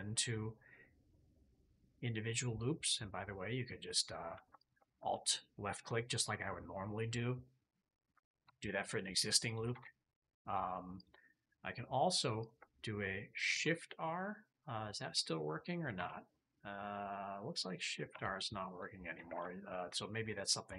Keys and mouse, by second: 4.5 alt+click, 8.4 r, 9.6 ctrl+z, 10.8 click, 12.3 alt+click, 13.4 shift+r, 14.1 click, 14.4 click, 15.9 shift+r, 16.7 click, 18.0 r, 19.2 ctrl+z, 19.6 click, 20.7 shift+middle click.